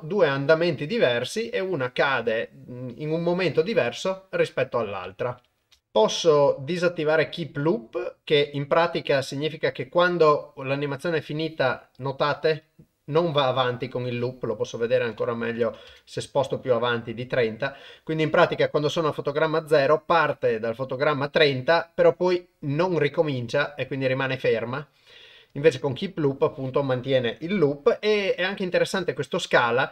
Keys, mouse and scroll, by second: 5.7 shift+space, 15.0 click, 29.7 click.